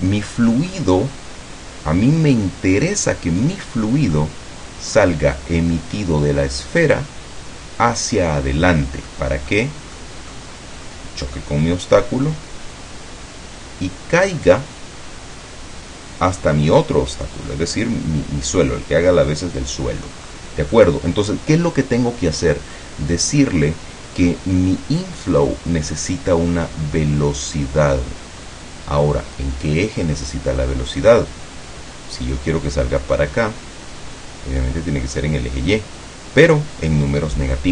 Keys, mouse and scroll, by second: 4.2-5.2 drag, 9.2 click, 10.0 click, 20.2-20.6 scroll up 1, 20.8-23.0 middle drag, 28.5-30.8 middle drag.